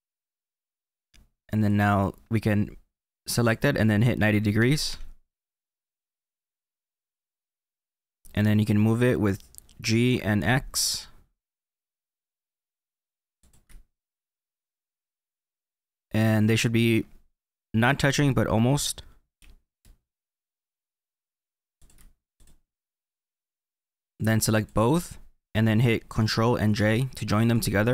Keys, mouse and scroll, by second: 1.6 click, 3.3 click, 6.4-9.4 middle drag, 9.8 g, 13.4 x, 13.9-14.5 scroll up 3, 14.5-18.0 middle drag, 19.3 g, 21.7 x, 21.8 x, 21.8 x, 22.3 click, 24.1 click, 26.7 ctrl+j.